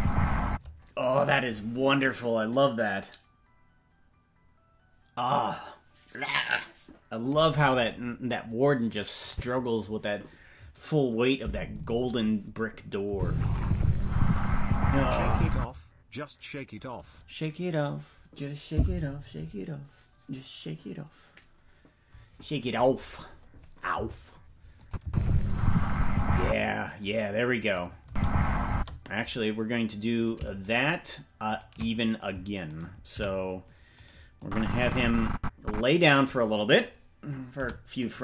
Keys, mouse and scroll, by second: 0.4 space, 9.3 click, 13.1 space, 15.5 space, 24.8 click, 25.0 space, 26.4 space, 28.0 space, 28.7 space, 30.2-33.1 right drag, 33.1 c, 34.4-35.9 drag, 37.5 i.